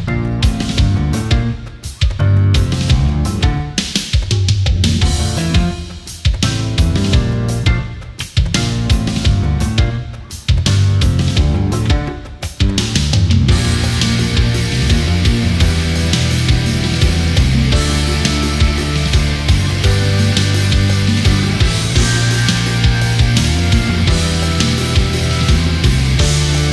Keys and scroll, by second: 9.1 ctrl+=, 12.1 ctrl+-, 12.3 space, 17.7 space, 23.8 space.